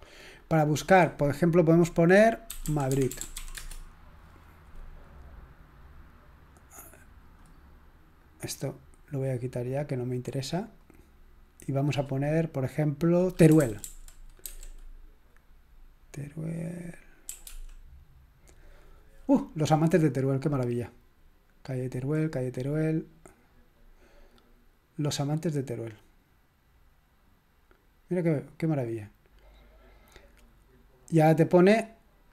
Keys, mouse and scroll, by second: 2.3-4.6 typing, 6.7-7.4 drag, 8.2 click, 8.7 click, 10.1 click, 10.7 click, 11.8 click, 13.3-14.4 typing, 17.0-18.0 typing, 20.7-21.5 scroll down 1, 21.5-22.3 scroll down 2, 22.6-23.5 scroll up 2, 23.5 scroll down 2, 24.3 click.